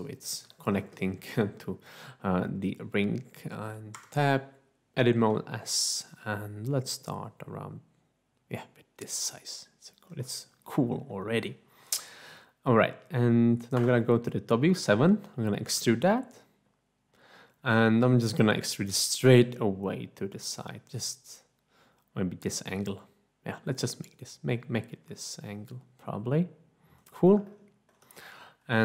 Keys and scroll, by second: 4.0 Tab, 5.1 s, 13.8 7, 15.6 e.